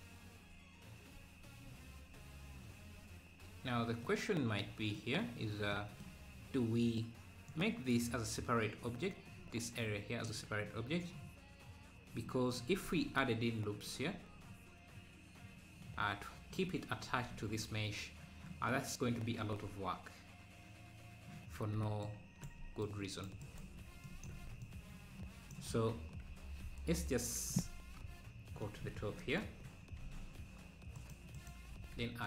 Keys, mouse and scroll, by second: 7.5-12.8 drag, 12.8 Tab, 19.5 Tab, 22.1-24.1 shift+right drag, 24.1-26.0 drag, 26.0-26.3 scroll up 1, 26.3 Tab, 28.0 KP_7, 28.9 z, 29.6-30.0 scroll up 2, 30.9 scroll up 1, 30.9 z, 31.4-32.2 shift+right drag.